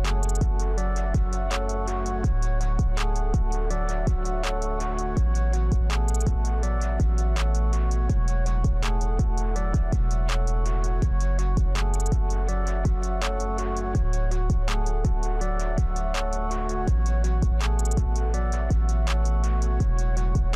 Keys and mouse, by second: 0.7 click, 2.5 click, 5.6-8.8 drag, 12.2 click, 15.2 click, 18.6 click, 19.3 click.